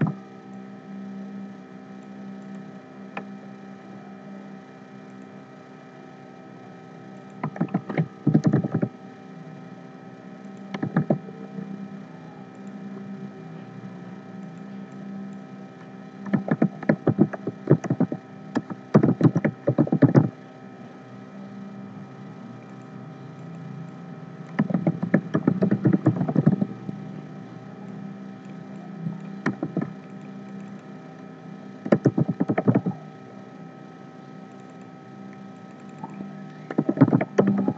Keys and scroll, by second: 7.6 ctrl+a, 10.9 ctrl+a, 16.5 ctrl+a, 24.7 ctrl+a, 29.6 ctrl+a.